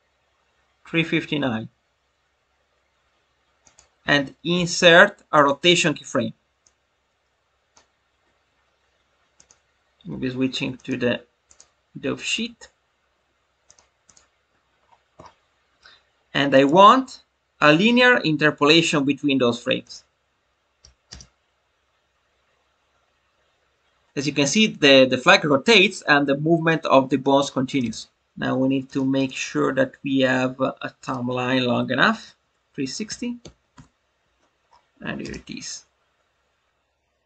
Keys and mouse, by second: 3.6 click, 6.5-7.8 drag, 9.3-10.2 drag, 10.8-11.5 drag, 13.6 click, 14.0 click, 16.5-19.8 right drag, 28.1 click, 29.2-31.0 drag, 32.0-34.3 drag.